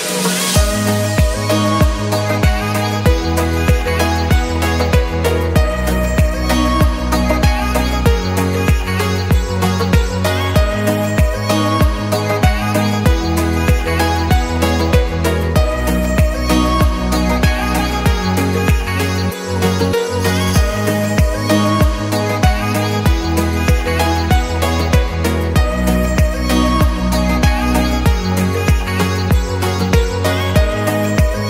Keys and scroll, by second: 0.1 Return, 1.0 Return, 2.0 Escape, 3.6 o, 5.7 Escape, 11.0 Escape.